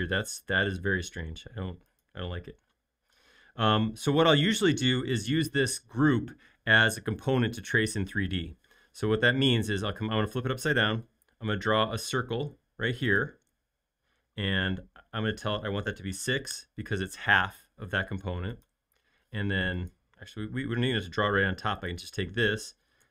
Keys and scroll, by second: 3.4 space, 11.8 c, 16.3 6, 16.7 Return, 18.0 space, 19.2 m, 22.4 space, 23.0 f.